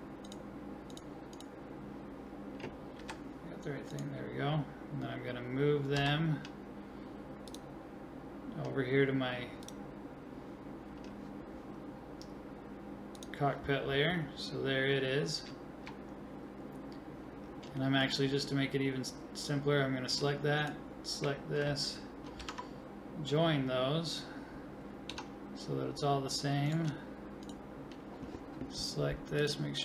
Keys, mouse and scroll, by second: 0.2-1.3 drag, 1.3 right click, 2.3 click, 2.3 right click, 3.2 g, 3.6 middle click, 4.2-6.0 drag, 6.0 m, 13.2-15.1 drag, 15.1 middle click, 15.2-20.6 middle drag, 20.6-22.4 right drag, 22.4 ctrl+j, 22.5-24.2 right drag, 24.2-26.7 middle drag, 25.1 Tab, 27.6-29.3 right drag.